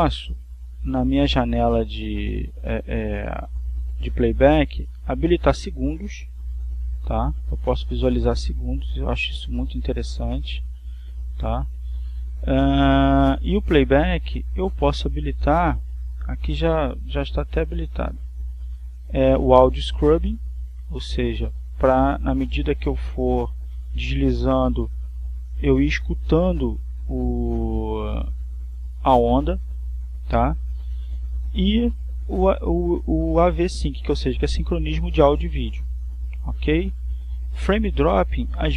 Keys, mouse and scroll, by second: 1.3 click, 6.5 click, 13.2 click, 14.5 click, 19.2 click, 24.8-31.8 drag, 31.8 click.